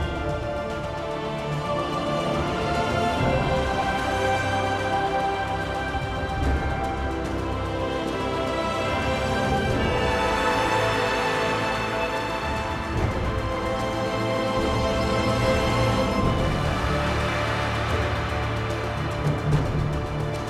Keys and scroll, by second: 0.1 r, 4.5 g, 12.2 r.